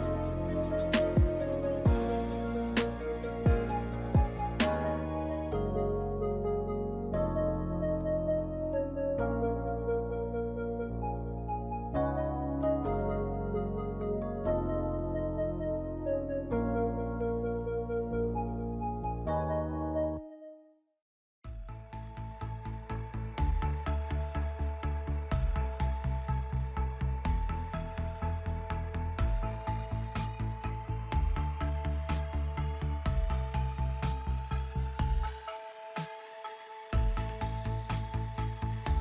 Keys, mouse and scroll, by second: 0.3 click, 1.4 i, 1.9 i, 3.8 click, 5.1 click, 7.4 click, 9.7 i, 11.7 click, 15.0 i, 22.9 click, 23.7 z, 25.2 space, 28.5 space, 30.7 click, 31.9 right click, 34.1 click, 36.5 t.